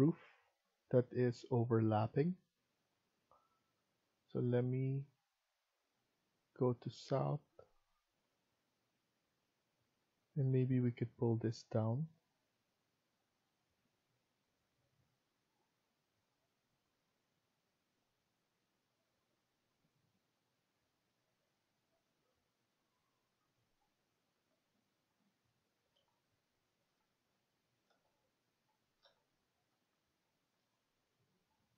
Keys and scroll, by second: 17.0 Escape, 17.4 Escape.